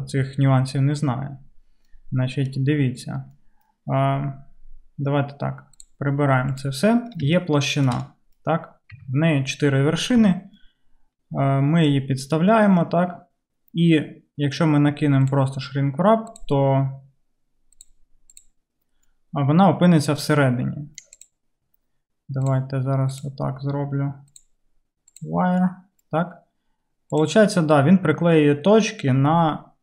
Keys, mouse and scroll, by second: 5.9-17.9 drag, 9.0 Tab, 10.2 Tab, 17.9-24.3 middle drag, 21.2 click, 24.3-28.4 drag, 28.4-29.8 middle drag.